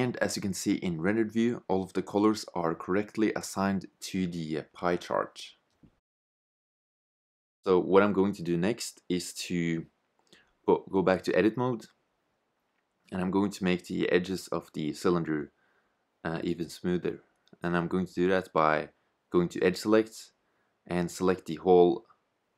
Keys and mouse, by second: 11.1 shift+z, 15.9 a, 19.2 click.